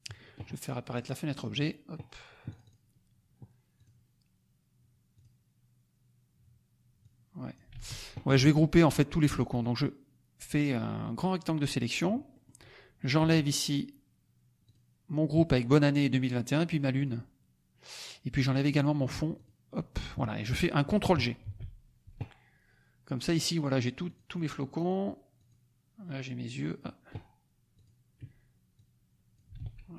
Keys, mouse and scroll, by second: 0.9 click, 1.6 click, 2.4 click, 3.7 click, 5.1 click, 7.0 click, 7.7 ctrl+z, 8.2 ctrl+click, 9.5-11.8 drag, 12.3 middle click, 12.3-12.7 scroll up 1, 14.7 shift+click, 17.0 shift+click, 19.4 shift+click, 21.4 ctrl+g, 23.5 click, 24.0 click, 24.8 click, 25.3 click, 27.7 click, 28.7 click, 29.6 ctrl+z.